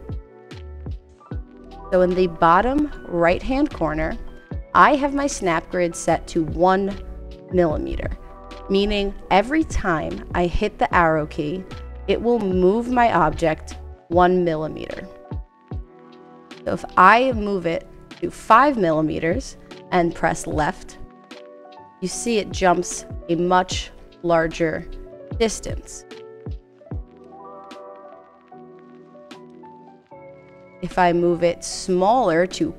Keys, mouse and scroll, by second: 16.6 click, 23.2 Left, 23.9 Left, 24.5 Left, 25.5 Right, 25.7 Right, 28.4 click, 30.3 click, 32.2 click.